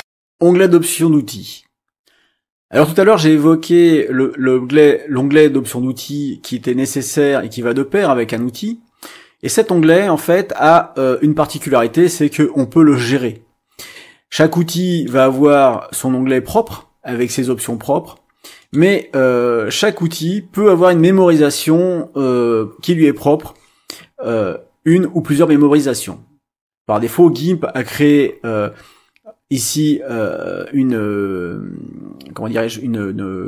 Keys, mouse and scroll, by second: 0.0 click, 14.9 click, 18.6 click.